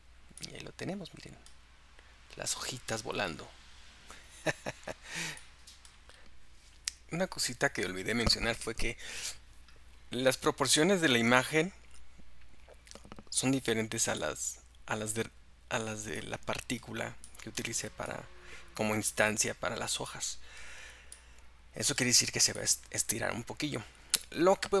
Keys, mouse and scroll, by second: 0.5-3.5 middle drag, 4.9-5.4 scroll down 2, 5.4 middle click, 6.2-8.8 scroll up 2, 8.8-15.8 middle drag, 16.2-17.9 middle drag, 18.1-22.3 middle drag, 22.7-24.8 middle drag.